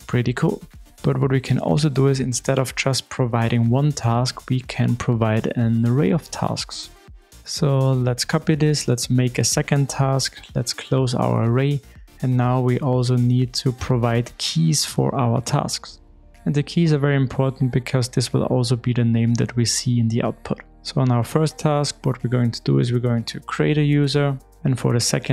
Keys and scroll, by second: 8.7 super+d, 12.8 alt+super+l.